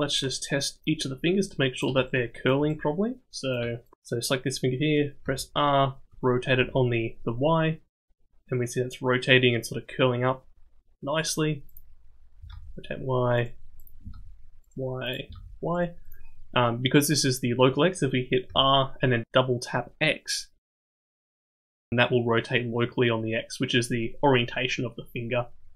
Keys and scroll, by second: 5.2 r, 12.4 r, 14.0 r, 15.2 r, 18.4 r.